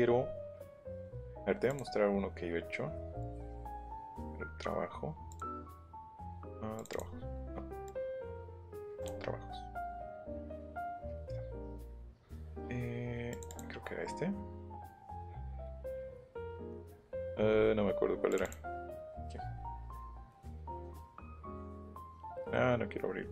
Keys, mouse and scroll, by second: 0.9 click, 1.7 click, 3.2 click, 3.9 click, 5.3 click, 6.7 click, 7.8 click, 8.8 click, 9.0 click, 10.7 click, 10.9 click, 13.3 click, 14.9-15.5 scroll down 2, 17.5 scroll up 1, 18.3 click, 19.2-19.7 scroll down 2.